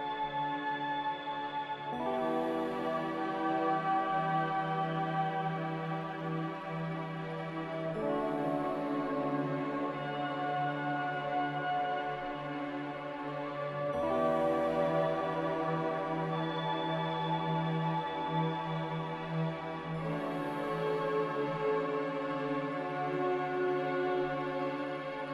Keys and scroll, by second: 7.3-8.1 typing, 10.7 z, 12.3 a, 13.0 ctrl+c, 20.9 m, 23.0 Escape.